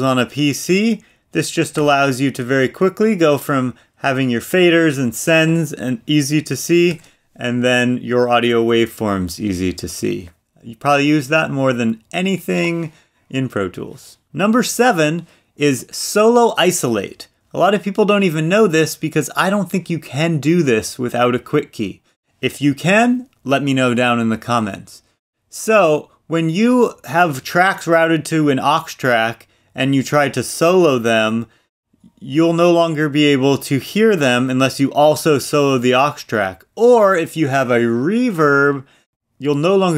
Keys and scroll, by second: 5.9 super+=, 8.6 super+=.